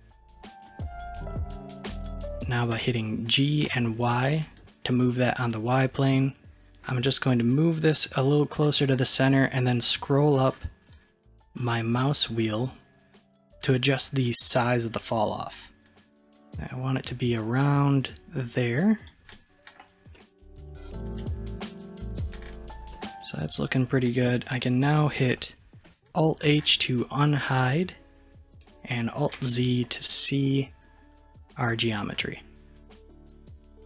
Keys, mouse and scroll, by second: 2.8 g, 20.2-22.1 middle drag, 22.1 click, 22.6-23.0 scroll down 1, 23.0-26.1 middle drag, 26.5 alt+h, 27.0-29.4 middle drag, 29.4 alt+z, 30.1-33.8 middle drag.